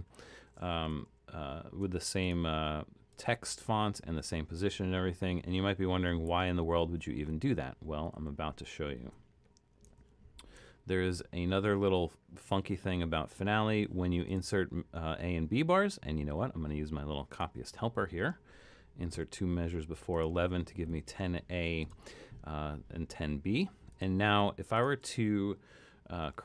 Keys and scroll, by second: 1.0 super+=, 6.3 super+z, 7.3 super+z, 8.1 super+z, 8.6 super+z, 10.0 super+-, 19.2 2.